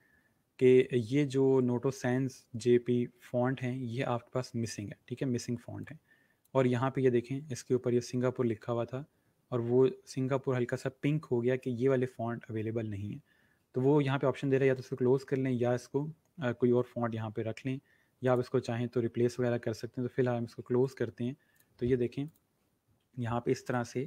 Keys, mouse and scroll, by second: 5.7 click, 18.1 click, 20.7 click, 23.2-23.6 alt+scroll up 2, 23.6 click.